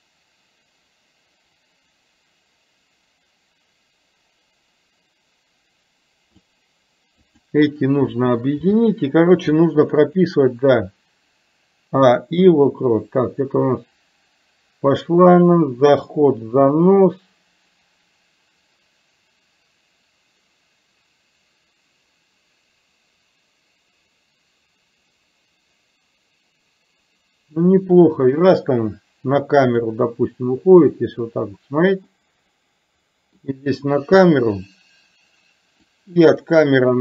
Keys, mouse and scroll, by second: 7.4 click, 8.8 g, 10.2 click, 10.9-30.0 drag, 32.3-33.5 middle drag, 36.0-37.0 drag.